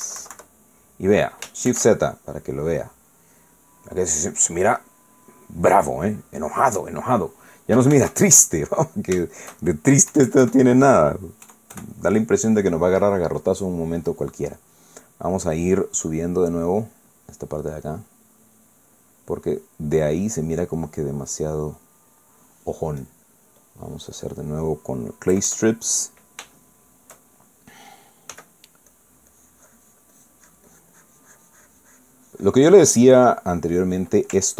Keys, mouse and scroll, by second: 0.3 KP_Subtract, 2.7 shift+z, 4.3 middle click, 8.9 shift+z, 11.1 KP_Add, 12.4 KP_Add, 14.0 click, 14.7 click, 15.9 middle click, 17.7 click, 18.6 click, 19.7 click, 20.4 click, 21.6-23.3 drag, 24.0 click, 24.6 click, 25.2 middle click, 26.3 KP_Add, 27.6 shift+middle click, 29.3 f, 29.9 click, 30.3-34.0 drag, 34.0-34.5 middle drag.